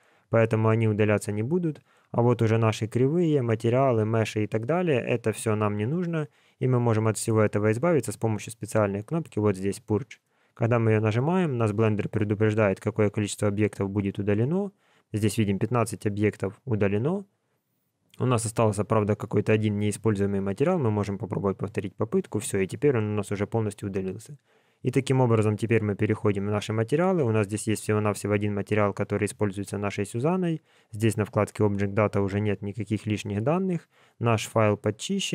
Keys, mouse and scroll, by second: 0.3 click, 1.4 click, 2.6 click, 3.1 click, 7.2 click, 10.4 click, 17.8 click, 19.3 click, 25.7 click, 30.9 click, 31.6 click.